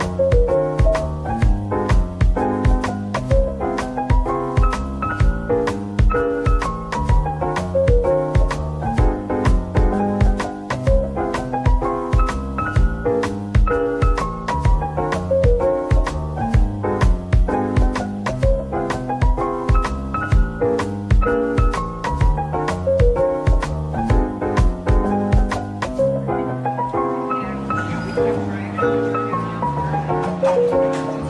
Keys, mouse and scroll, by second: 1.6 middle click, 2.6 Tab, 2.8-3.3 scroll down 1, 3.3 Tab, 3.9 scroll down 1, 4.6 z, 5.9 scroll, 6.1 scroll down 1, 12.9 middle click, 14.2 scroll down 1, 14.8 middle click, 20.8 middle click, 21.5 scroll up 1, 24.5 scroll down 1, 25.1 scroll up 1, 25.9 scroll up 1, 26.4 double click, 26.8-28.0 typing.